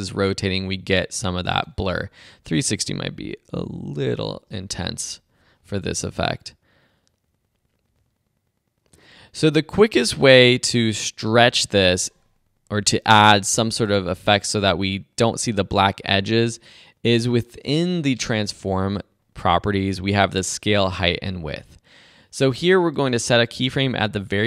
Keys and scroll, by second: 4.0 Up.